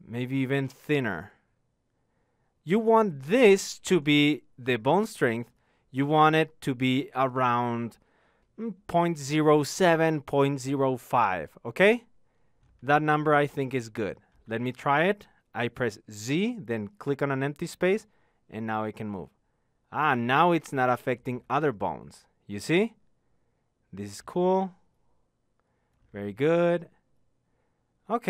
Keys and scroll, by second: 16.0 z.